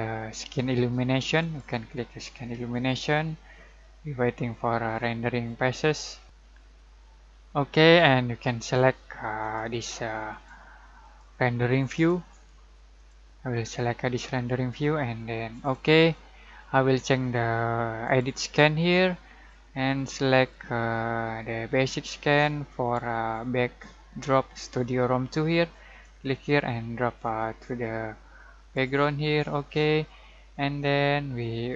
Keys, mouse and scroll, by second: 1.4 click, 9.4 click, 15.6 click, 18.0 click, 20.5-25.8 drag, 26.0-31.7 drag.